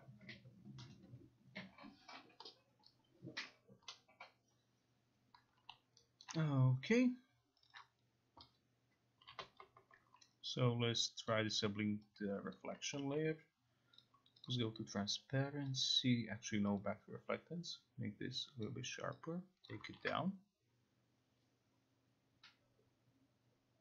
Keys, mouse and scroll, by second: 6.9 alt+right click, 7.7 click, 7.8 click, 9.4 Home, 11.4 click, 12.6 click, 14.1 click, 14.6 click, 15.8 click, 16.4 click, 18.7 click, 19.8 click.